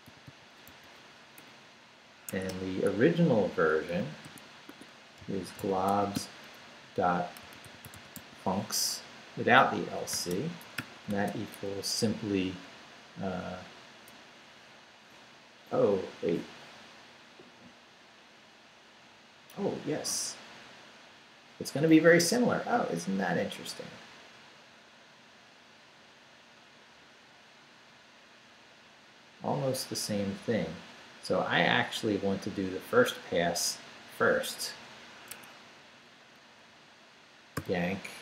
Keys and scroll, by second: 0.0 i, 0.7 c, 1.4 Up, 2.3 ⟲, 2.5 Return, 3.9 Up, 4.2-8.6 typing, 4.7 Tab, 10.1 space, 10.8 =, 11.1 space, 22.2 Down, 22.7 Right, 35.3 Escape, 36.4 Right, 37.5 y.